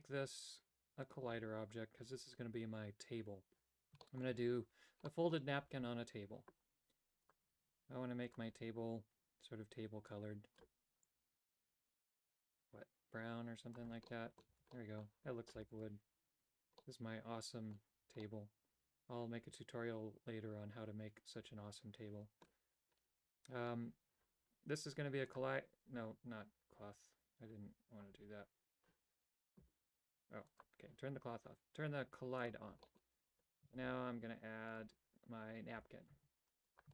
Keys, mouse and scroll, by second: 1.0 click, 4.0 shift+middle click, 5.0 middle click, 7.2 click, 8.2 click, 14.0 middle click, 14.5 a, 14.7 middle click, 15.7 right click, 16.4 Tab, 16.7 middle click, 17.9 Tab, 18.2-22.4 middle drag, 25.3 click, 30.5 click, 32.4 click, 32.8 middle click, 33.3 click, 33.7 shift+a, 35.7 g.